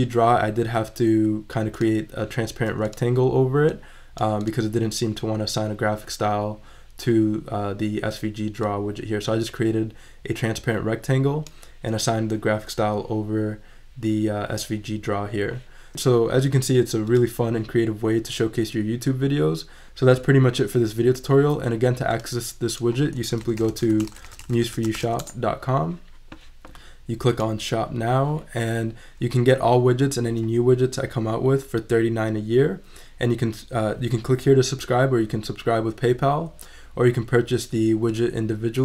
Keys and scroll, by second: 23.2-25.5 typing.